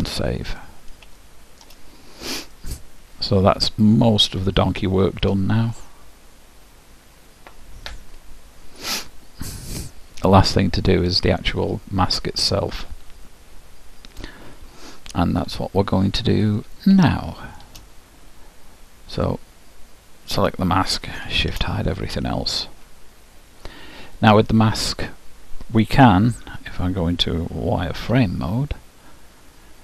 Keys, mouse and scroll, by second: 1.2-4.3 middle drag, 4.3-5.3 scroll up 1, 5.3-8.0 scroll up 1, 9.1-10.9 middle drag, 17.1-18.9 middle drag, 19.1-21.9 drag, 21.5 shift+h, 22.1 click, 24.2-26.2 drag, 26.4 KP_1, 28.0 z, 29.2-29.8 middle drag.